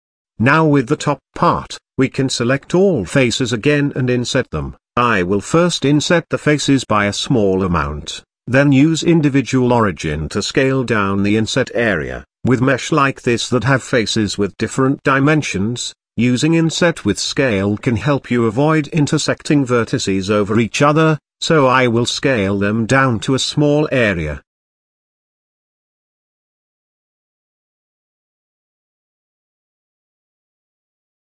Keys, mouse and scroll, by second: 0.1 a, 0.5-1.1 middle drag, 1.1 Tab, 1.3 Tab, 1.6 click, 2.0 Tab, 2.4-3.4 middle drag, 3.4 scroll up 1, 4.4 i, 18.1-19.5 drag, 19.5-20.0 shift+middle drag, 20.0-20.7 scroll up 2, 20.9 s, 22.9 s, 24.5 s, 26.5 s, 28.0-28.4 scroll down 1, 28.4 shift+middle click, 28.7-29.5 scroll up 4, 30.1 s.